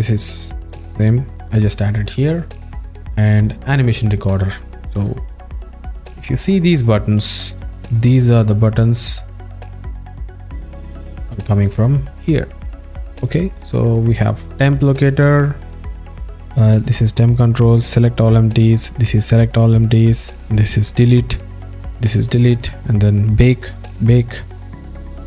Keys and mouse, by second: 6.4 alt+middle click.